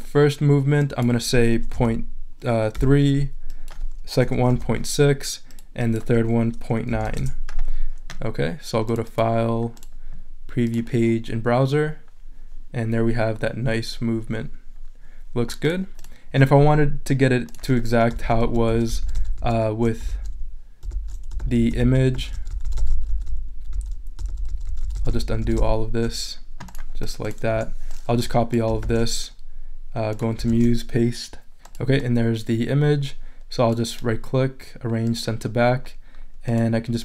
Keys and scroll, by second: 2.7 3, 4.5 6, 7.0 9, 7.2 Return, 18.2 super+z, 27.5 BackSpace, 28.8 super+c, 30.5 super+v.